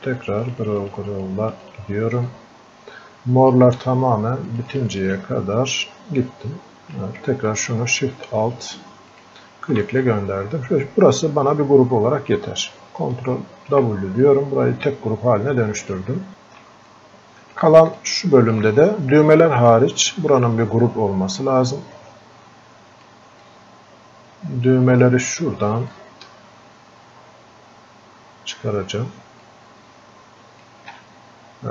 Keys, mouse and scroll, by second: 10.0-13.4 drag, 13.4 ctrl+w, 14.3-16.3 drag, 16.3 ctrl+shift+click, 16.9 click, 18.0-19.7 alt+drag, 19.7-23.4 drag, 23.4-26.0 drag, 26.0-31.3 ctrl+alt+shift+drag, 31.3 scroll up 1.